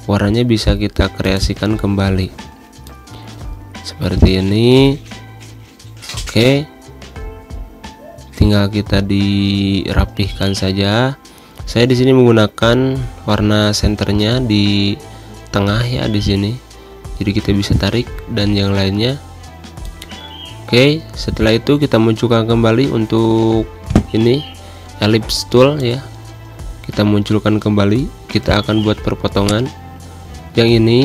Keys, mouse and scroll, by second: 15.9 space, 16.1 click, 16.3 space, 25.5 click, 25.8 space, 25.9 click, 26.8 z, 26.9 click, 27.9-30.4 typing, 28.0 click, 28.9 click, 29.6 click.